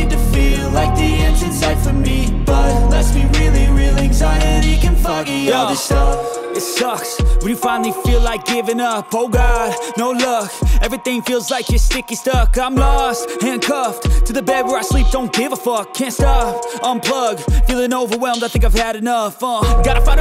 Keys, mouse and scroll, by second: 1.0 right click, 18.1 shift+click.